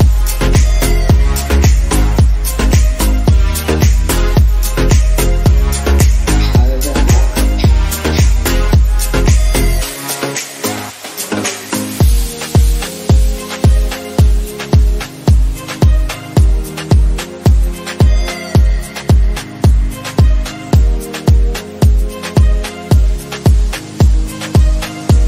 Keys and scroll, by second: 4.7 ctrl+z, 6.3 ctrl+z.